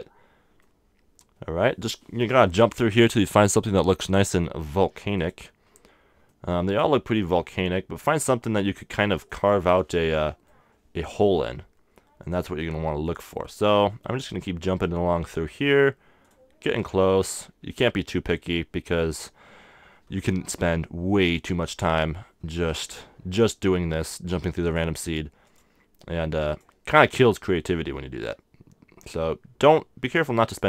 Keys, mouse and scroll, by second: 0.6-2.4 middle drag, 5.1-7.1 drag, 6.3 right click, 6.8-8.1 middle drag, 8.8-11.5 middle drag, 13.0-14.8 drag, 14.0 right click, 14.6-15.7 middle drag, 16.2-18.2 drag, 17.1-19.0 middle drag, 21.2-23.1 drag, 22.5-24.3 middle drag, 24.7-28.3 drag, 27.7-29.5 middle drag, 30.5-30.6 drag.